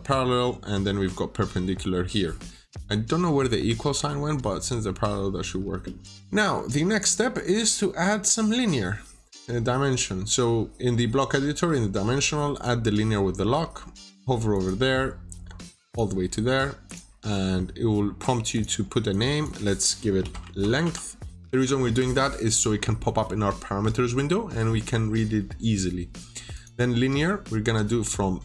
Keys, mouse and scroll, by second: 6.0 scroll down 1, 6.1 middle click, 12.4 click, 13.1 scroll up 1, 14.4 click, 16.1 middle click, 16.8 click, 19.9-21.9 typing, 22.6 scroll down 1, 23.0 middle click, 24.4 scroll up 1, 24.9 middle click, 26.4 click.